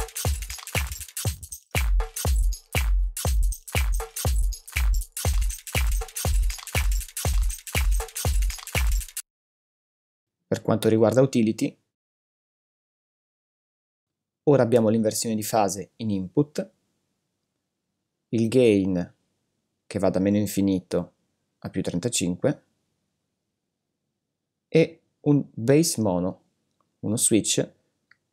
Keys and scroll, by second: 9.1 space.